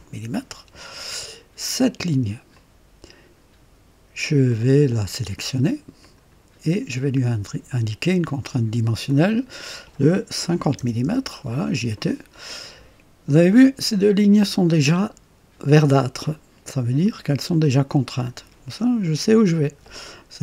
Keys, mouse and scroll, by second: 2.5 click, 4.5 click, 6.0 click, 9.1 click, 10.5 KP_5, 10.8 KP_0, 11.0 Return.